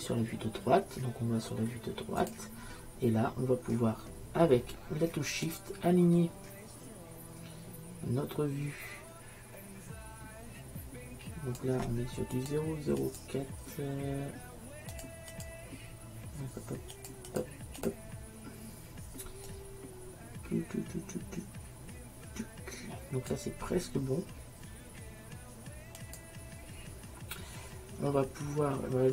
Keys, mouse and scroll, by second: 12.4-21.5 drag, 26.1-28.1 drag.